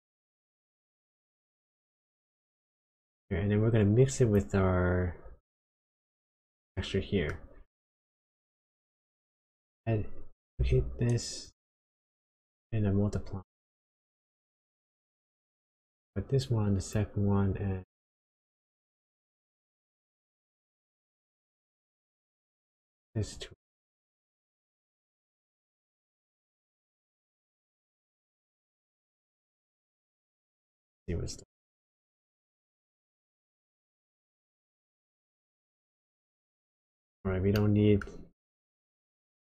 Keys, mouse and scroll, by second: 1.4 click, 4.2 click, 6.0-6.6 scroll down 3, 6.6 middle click, 8.0 click, 9.4 click, 10.5 shift+d, 12.0 click, 16.0 click, 19.1 click, 23.0 click, 28.5 middle click, 31.4 ctrl+shift+click, 36.0 middle click, 36.9-37.4 scroll up 6, 37.5 middle click, 38.1-39.0 scroll up 1, 39.0 click.